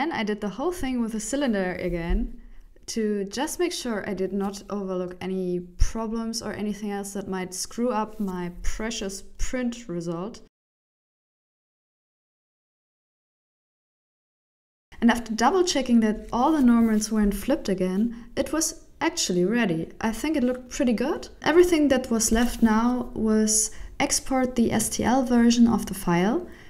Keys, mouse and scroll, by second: 0.0 Tab, 0.1 right click, 0.1 middle click, 0.3 right click, 0.4-4.5 typing, 0.8 right click, 2.1 middle click, 2.5 click, 3.0 Tab, 3.4 middle click, 3.6 shift+middle click, 4.9 middle click, 5.3 ctrl+z, 5.4 middle click, 5.7 e, 6.3 middle click, 6.5 ctrl+1, 6.7 Tab, 6.9 ctrl+1, 7.2 click, 7.5 click, 7.6 middle click, 7.6 Tab, 7.8 alt+right click, 8.0 2, 8.1 alt+shift+right click, 8.3 alt+right click, 8.4 middle click, 8.6 alt+shift+right click, 8.8 ctrl+z, 9.0 alt+shift+right click, 9.1 middle click, 9.3 middle click, 9.5 shift+e, 9.7 Tab, 9.7 middle click, 9.8 Tab, 9.9 a, 10.0 shift+n, 10.1 Tab, 10.1 middle click, 10.4 KP_1, 10.7 click, 10.9 click, 11.1 middle click, 11.4 right click, 11.6 click, 11.8 click, 12.2 click, 12.3 click, 12.6 middle click, 12.7 right click, 12.9 KP_1, 13.4 s, 14.0 middle click, 15.1 click, 16.2 middle click, 16.5 KP_1, 16.9 click, 18.9 ctrl+alt+shift+m, 18.9 Tab, 18.9 middle click, 18.9 scroll down 4, 19.6 right click, 20.4 h, 20.8 middle click, 21.3 right click, 21.5 shift+middle click, 21.8 middle click, 23.3 click.